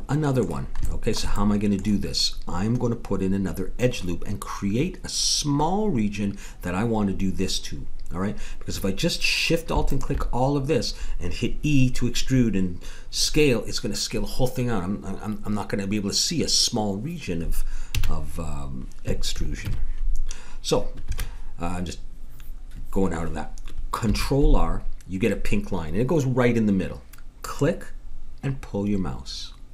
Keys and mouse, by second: 9.9-11.7 drag, 17.9 a, 19.6 ctrl+r, 24.0 ctrl+r.